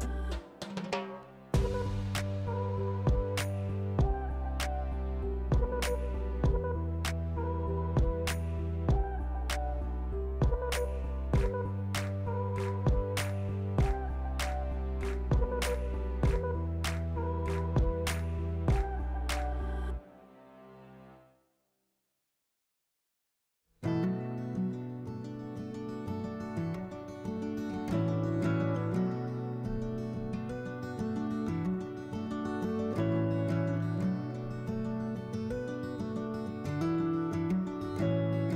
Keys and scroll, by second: 2.4 s, 3.6-5.9 typing.